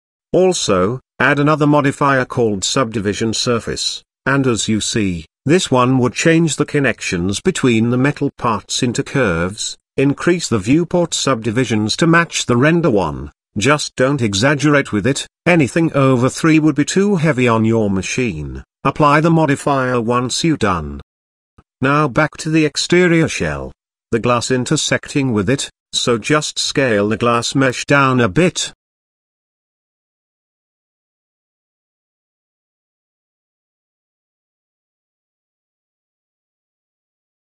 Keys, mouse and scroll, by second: 0.3 click, 1.6-4.2 drag, 6.8-7.4 middle drag, 7.7-8.1 scroll up 2, 11.2 click, 18.0-18.6 drag, 19.3 scroll down 3, 19.9-20.4 middle drag, 20.8 click, 23.5 click, 24.5 click, 25.3-26.4 middle drag, 27.9 click, 28.6 click, 29.3 click, 30.8 click, 31.4-32.1 scroll down 2, 31.7-32.1 middle drag, 32.2 shift+middle drag, 32.7-33.0 scroll up 2, 33.3 s, 36.5 click.